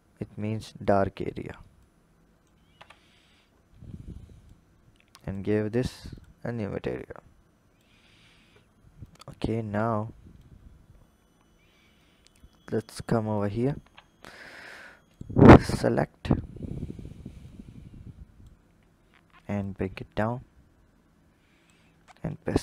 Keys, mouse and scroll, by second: 0.6 click, 1.6 click, 2.6 Tab, 3.0-4.0 scroll down 5, 4.0 click, 5.0 click, 6.0 click, 7.9-8.8 scroll up 1, 8.8 click, 10.8-11.8 scroll up 1, 11.8-13.3 drag, 13.6 Tab, 14.3 alt+click, 14.9 click, 17.3-19.6 drag, 22.4 i.